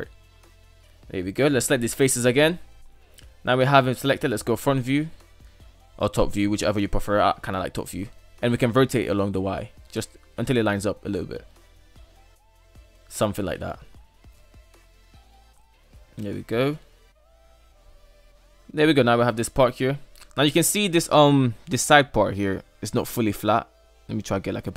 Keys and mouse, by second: 0.1 KP_3, 0.4 right drag, 1.0 ctrl+right click, 1.6 Tab, 2.1 Tab, 3.2 Tab, 3.4 KP_1, 3.8 Tab, 4.8 Tab, 5.0 KP_7, 5.4 Tab, 7.0 r, 13.8 shift+middle click, 15.2 Tab, 15.6-16.1 middle drag, 16.5 shift+middle click, 16.8-19.6 middle drag, 19.8-21.9 middle drag, 22.0 Tab, 22.4-24.4 middle drag, 24.3 Tab.